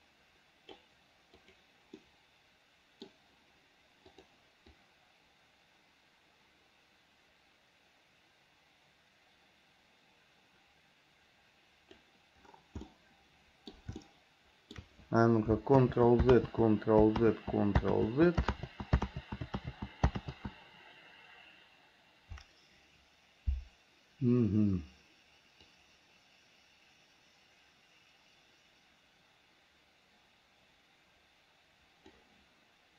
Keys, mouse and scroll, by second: 1.7 click, 2.2-3.3 middle drag, 4.4 click, 5.0-12.3 drag, 13.1 middle click, 14.2 shift+middle click, 16.0 ctrl+z, 16.6 ctrl+z, 17.5 ctrl+z, 18.2 ctrl+z, 18.8 ctrl+z, 19.9 ctrl+z, 20.5 ctrl+z, 25.9-32.4 drag.